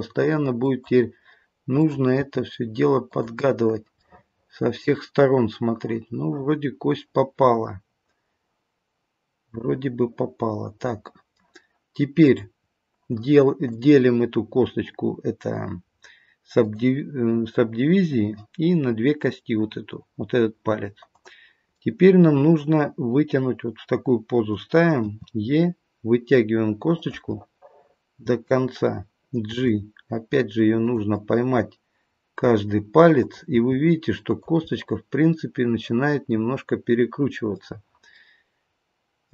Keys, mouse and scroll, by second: 1.8 click, 2.2 g, 4.0 middle click, 12.2 click, 13.7 click, 19.2-21.1 scroll up 1, 21.1 click, 21.1 scroll up 1, 21.7 middle click, 25.0 e, 27.4 middle click, 28.0 middle click, 29.5 g, 31.2 middle click, 33.1 click, 33.5 g, 34.6 middle click, 38.1 middle click.